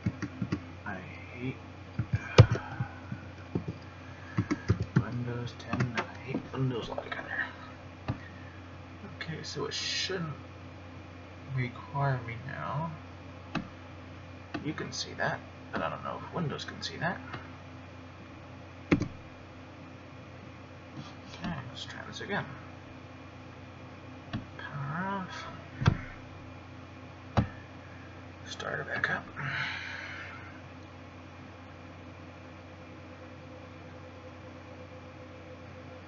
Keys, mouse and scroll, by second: 13.8 click.